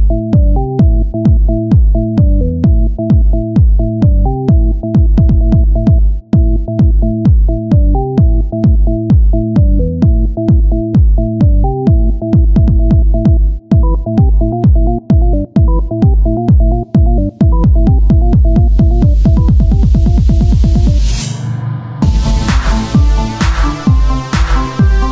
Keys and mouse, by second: 0.0 z, 0.4 z, 1.2 ctrl+z, 2.8 click, 3.9-6.8 typing, 7.8 click, 10.0 KP_1, 10.2 z, 12.3 z, 12.5-13.5 drag, 15.4-17.1 drag, 17.1 x, 19.5 ctrl+j, 20.1 Tab, 22.0-23.7 drag, 23.7 KP_1, 24.3 middle click, 24.4-25.1 drag, 24.6 z, 24.8 c.